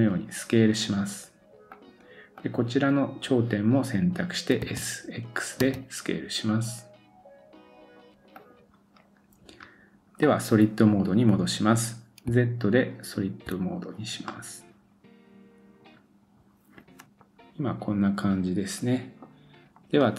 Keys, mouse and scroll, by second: 2.4-8.5 drag, 4.6 s, 8.5-20.1 middle drag, 8.9-10.2 scroll down 2, 10.2-12.3 scroll down 2, 12.3 z, 14.2 scroll down 1.